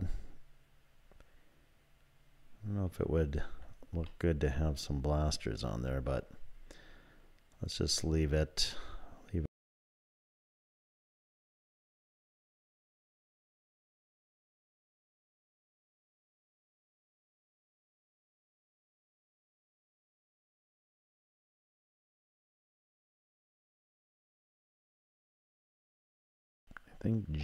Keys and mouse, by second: 4.2-5.6 middle drag, 9.4 shift+3, 9.6 ctrl+r, 10.0 middle click, 10.7 click, 11.3 click, 11.5 click, 12.7 click, 13.5 click, 14.3 shift+click, 14.5 shift+click, 14.9 2, 15.5 shift+click, 15.8 z, 16.3 1, 16.5 click, 17.4 e, 18.0-19.3 drag, 21.0 e, 21.7-23.0 drag, 23.1 click, 25.5 shift+click, 26.6 click.